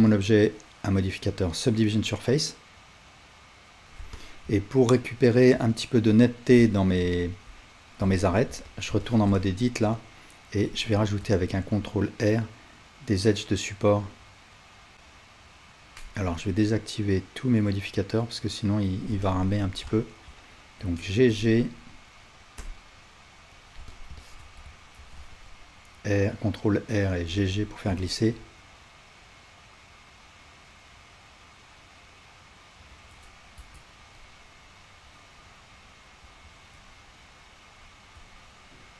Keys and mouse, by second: 4.0-9.5 alt+drag, 4.0-9.5 alt+right drag, 8.1 Tab, 9.8 alt+click, 9.8 alt+right click, 10.6-17.2 drag, 10.6-14.9 right drag, 11.4 ctrl+r, 14.9-17.2 middle drag, 17.2-23.9 right drag, 18.2-23.6 drag, 21.3 g, 23.9-27.3 ctrl+alt+middle drag, 25.0 ctrl+r, 27.3 alt+right click, 27.5-38.9 alt+middle drag, 33.6 Tab.